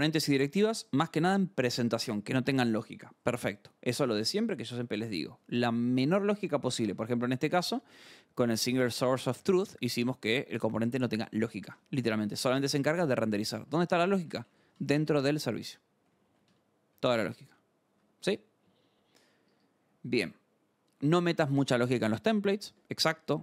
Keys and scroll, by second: 4.3 scroll, 6.9 alt+Tab, 7.2-10.2 typing, 10.6 Return, 11.3-16.9 typing, 11.7 Return, 17.9 alt+Tab, 19.4 scroll, 22.6 alt+Tab.